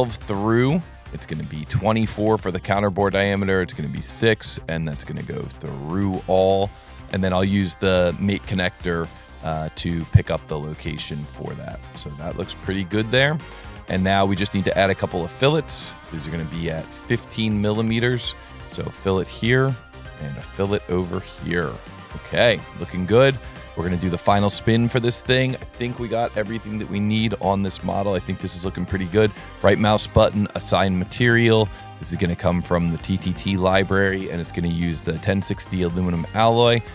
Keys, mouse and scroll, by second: 0.0 Tab, 0.3 Tab, 0.8 Tab, 1.5 Tab, 1.8 Tab, 2.7 Tab, 3.4 Tab, 4.5 click, 6.1 click, 7.6 click, 8.7 click, 12.7 click, 14.6 s, 15.5 click, 16.4 Tab, 17.6 Tab, 19.3 click, 19.6 scroll up 2, 19.8 middle click, 21.6 click, 23.5 click, 23.9 middle click, 24.3-26.7 middle drag, 27.3 middle click, 29.1 right click, 30.4 click, 32.0 click, 32.4 click, 33.0 click, 33.7 click, 35.0 click, 36.3 click.